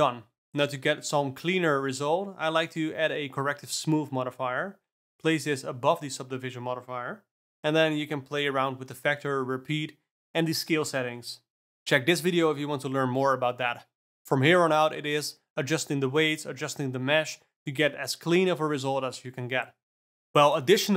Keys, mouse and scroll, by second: 0.1 click, 0.8-2.9 alt+middle drag, 2.9-3.8 drag, 5.4-9.5 drag, 9.5-11.1 scroll up 1, 11.1-14.1 drag, 14.3 g, 17.0 alt+click, 17.3 g, 18.7 alt+click, 18.9 g.